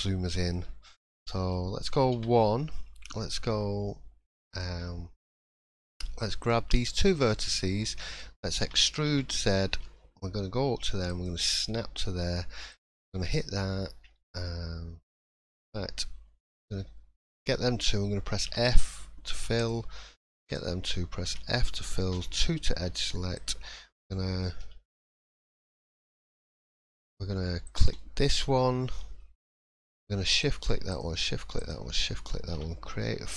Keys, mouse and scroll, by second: 0.9 shift+middle click, 1.5 middle click, 2.1 1, 2.4 middle click, 2.8 scroll up 2, 4.5 click, 4.8 middle click, 6.4 shift+click, 6.8 shift+middle click, 7.3 middle click, 8.0 shift+middle click, 8.6 e, 12.7 shift+click, 16.4 click, 17.2 shift+click, 18.4 f, 19.5 click, 20.4 shift+click, 21.2 f, 22.1 2, 23.3 alt+click, 25.9 click, 27.6 click, 28.0 middle click, 30.3 shift+click, 30.4 shift+click, 31.0 shift+click, 31.9 shift+click, 32.5 f, 33.0 middle click.